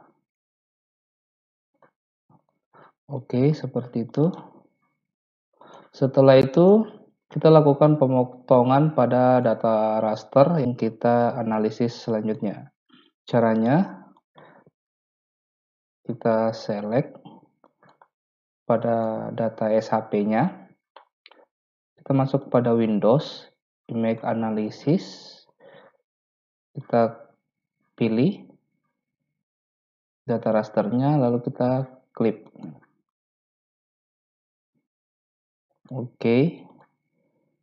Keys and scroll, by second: 15.9 ctrl+a.